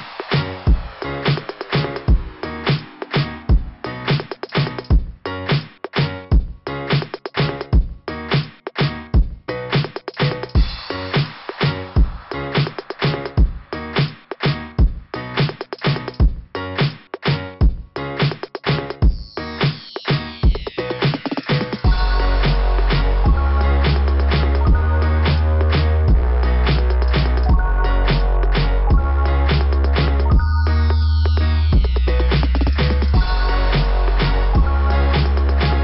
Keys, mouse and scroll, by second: 0.3 click, 0.6 click, 1.3 click, 1.6 click, 2.8 click, 3.0 click, 4.3 click, 5.8 click, 6.6 click, 6.9 click, 7.3 click, 9.0 click, 10.7 click, 12.6 click, 14.3 click, 14.5 click, 15.3 click, 19.7 click, 19.9 click, 20.0 click, 20.1 click, 21.4 scroll down 2, 23.3 click, 23.4 click, 26.4 click, 26.5 click, 28.8 click, 28.9 click, 29.0 click, 29.1 click, 29.8 click, 30.0 click, 32.6 click, 34.3 click.